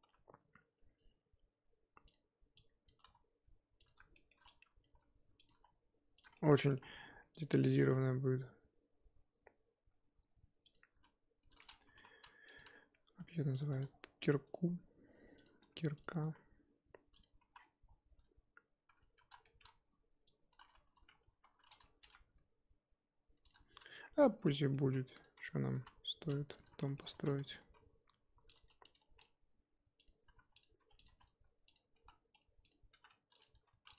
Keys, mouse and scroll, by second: 0.0 e, 2.9 click, 3.0 s, 4.1 shift+middle click, 4.8 click, 4.9 e, 5.5 s, 6.4 shift+middle click, 6.7 e, 7.8 e, 10.9 s, 11.8 g, 12.6 e, 13.7 s, 15.6 e, 16.2 s, 17.5 z, 17.5-17.9 scroll down 6, 18.1 Tab, 18.9 Tab, 19.3 z, 19.4 shift+middle drag, 19.7-20.2 scroll up 3, 20.5 click, 21.3 3, 22.0 ctrl+b, 24.4-24.8 middle drag, 24.8 3, 25.2 click, 25.7 KP_1, 26.5 scroll up 2, 26.8-27.1 shift+middle drag, 27.1 shift+d, 27.6 s, 28.8 g, 30.2-33.9 typing.